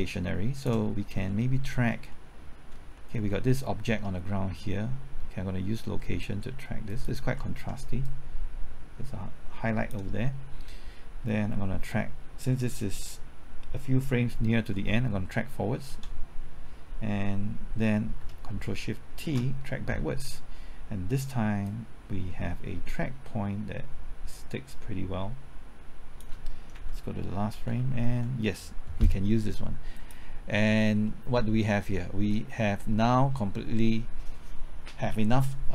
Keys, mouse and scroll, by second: 1.3 middle click, 1.8-2.1 scroll up 1, 2.1 middle click, 2.6-3.0 scroll up 1, 3.0 middle click, 6.9 ctrl+click, 8.1-10.8 drag, 15.9 ctrl+t, 19.2 ctrl+shift+t, 21.7-26.8 drag, 26.7 Right, 27.6-28.1 typing, 29.9 click, 30.8 scroll down 1, 31.1 middle click.